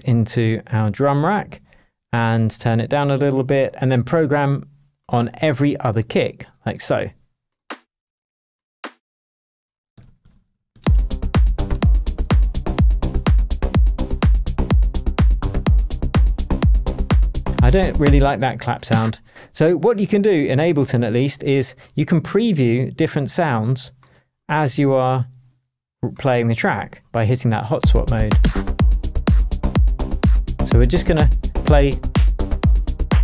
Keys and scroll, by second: 10.0 super+d, 10.6 super+d, 10.8 super+space, 11.7 super+d, 12.6 shift+super+d, 12.7 shift+super+Tab, 16.4 super+z, 18.2 space, 27.8 space, 28.3 Down, 28.6 Return, 31.1 Return, 32.4 Down, 32.6 Return.